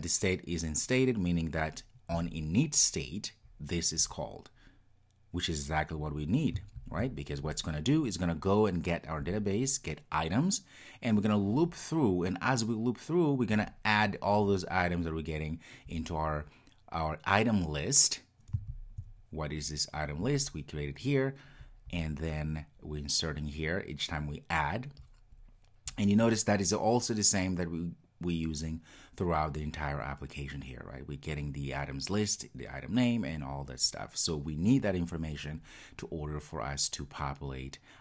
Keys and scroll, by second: 6.8 super+b, 18.8 super+b.